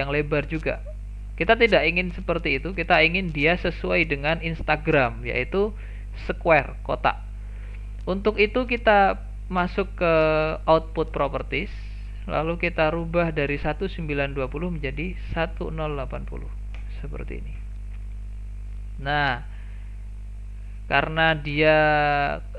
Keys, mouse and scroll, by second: 4.9 click, 11.3 click, 14.3-17.3 drag, 20.6 click.